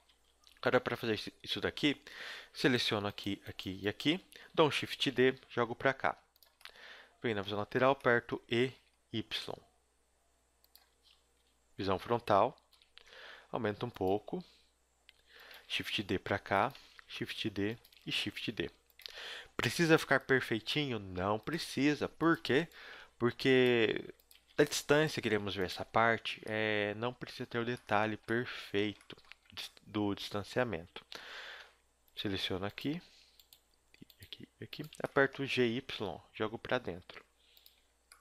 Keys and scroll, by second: 0.1 a, 0.4 KP_1, 5.0 shift+d, 8.4 e, 10.9-14.1 typing, 15.6 shift+d, 16.9 shift+d, 17.9 shift+d, 19.0 a, 19.3 b, 20.3 x, 21.7 g, 22.3 a, 22.6 b, 23.7-25.8 typing, 28.1 a, 29.4 z, 30.7 z, 31.6 ctrl+Tab, 35.4 g.